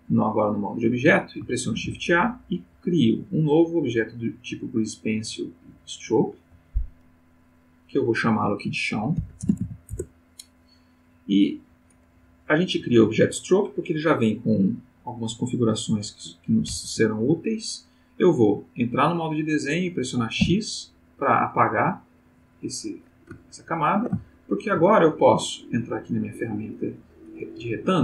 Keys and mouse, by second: 0.5 click, 1.7 shift+a, 5.6 click, 7.4 click, 9.2 shift+c, 9.4 shift+h, 9.6 shift+o, 9.9 shift+Return, 16.7 ctrl+Tab, 17.4 click, 20.4 x, 21.9 click, 23.4-24.9 ctrl+middle drag, 26.1 click.